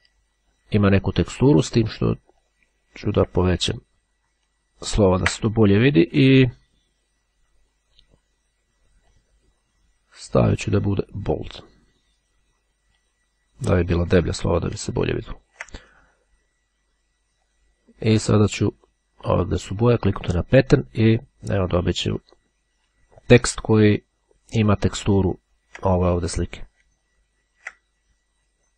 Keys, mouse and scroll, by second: 0.5-1.1 ctrl+scroll up 2, 1.1-1.7 ctrl+scroll up 1, 2.1 click, 2.9-3.5 ctrl+scroll down 2, 4.6-5.7 drag, 9.1 click, 11.1 click, 13.1 click, 13.9 click, 15.0-16.1 ctrl+drag, 17.5 click, 19.9 click, 21.8 click, 23.7 click, 25.3-25.9 ctrl+scroll down 1, 26.9-27.4 ctrl+scroll up 2.